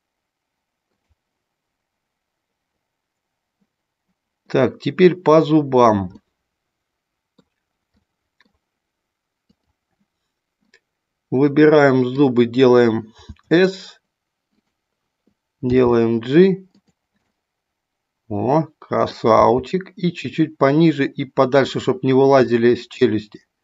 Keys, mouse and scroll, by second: 4.7-6.0 middle drag, 6.2 scroll up 1, 6.4-7.5 middle drag, 8.0 middle click, 9.5 click, 10.6-12.1 middle drag, 13.2 s, 14.5 click, 15.6 g, 17.2-19.1 middle drag, 19.4 g, 22.5-23.6 middle drag.